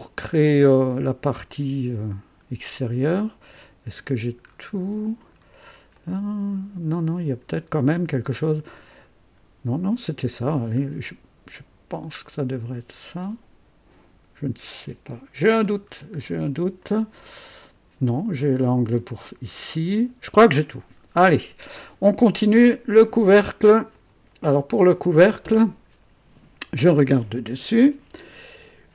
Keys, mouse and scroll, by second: 3.1 right click, 3.4 click, 3.5 right click, 4.5 scroll up 2, 5.3 scroll up 2, 5.9-7.4 right drag, 7.9 scroll up 2, 8.3 right click, 10.8 scroll up 2, 15.3-15.7 scroll down 2, 16.2 scroll down 2, 16.8-18.0 right drag, 18.0 click, 20.8 scroll down 2, 21.3 click, 23.9 click, 26.8 KP_2.